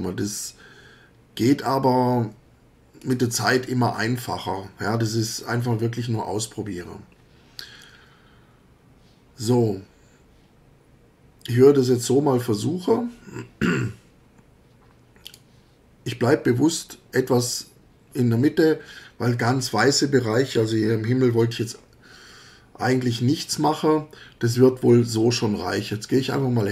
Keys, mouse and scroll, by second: 3.0 click, 15.2 click.